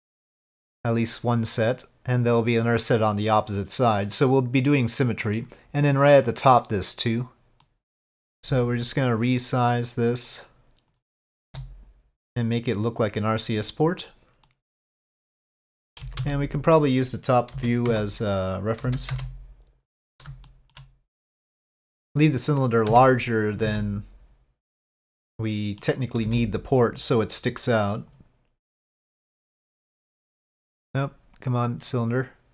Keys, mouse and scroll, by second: 7.7 middle click, 7.7 s, 8.5 s, 10.3-11.5 drag, 11.5 s, 14.5 middle click, 16.0 KP_5, 16.2 KP_7, 17.5 z, 20.4 shift+click, 21.5 middle click, 21.9 Tab, 22.9 3, 23.0 click, 23.6 s, 25.2 middle click, 26.2 s, 28.9 middle click, 30.1 click, 31.9 click.